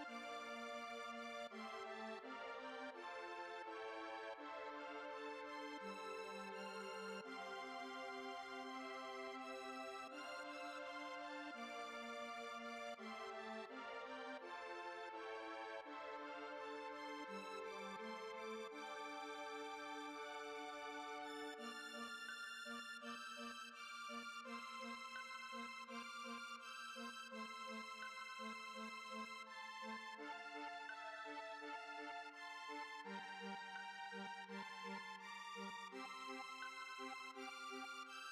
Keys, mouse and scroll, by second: 0.1 middle click, 0.3 Tab, 0.6 click, 1.0 shift+click, 1.4 KP_7, 2.6 click, 2.8-3.3 scroll up 3, 3.0 shift+middle click, 3.4 g, 4.5 Tab, 4.7 middle click, 5.0 Tab, 5.3 a, 6.2 F3, 7.6 BackSpace, 8.9 Tab, 9.2 Tab, 9.4 F3, 9.9 F3, 10.1 F3, 10.3 F3, 11.5 shift+middle click, 11.8 Tab, 12.1 Tab, 12.3-17.3 shift+middle drag, 18.1 Tab, 18.5 click, 21.6 h, 22.1 click, 22.7 KP_7, 23.2 Tab, 24.2 shift+middle click, 24.8 scroll up 2, 25.4 shift+middle click, 25.9 scroll up 1, 31.1 click, 31.6 click, 33.3 scroll up 1, 33.8 click, 36.7 click.